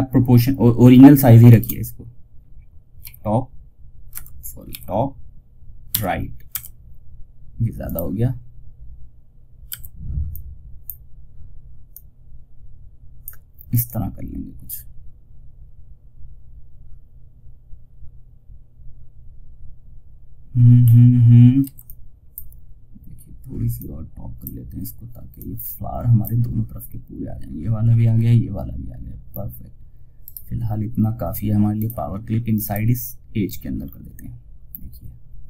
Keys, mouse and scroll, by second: 0.8 shift+click, 2.3 y, 3.4 space, 4.0 t, 5.2 r, 7.1-20.0 drag, 20.0 scroll up 1, 20.9 F2, 21.1-29.5 drag, 29.5 right click, 31.0 click, 33.1 scroll down 1.